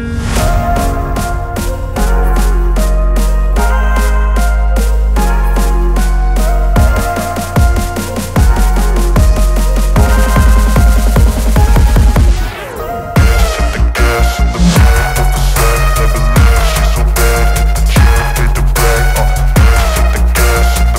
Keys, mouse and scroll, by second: 0.0-2.6 alt+drag, 3.6-6.8 typing, 8.0 shift+p, 9.1 ctrl+a, 10.6 click, 16.0 ctrl+t, 18.6-20.3 alt+drag.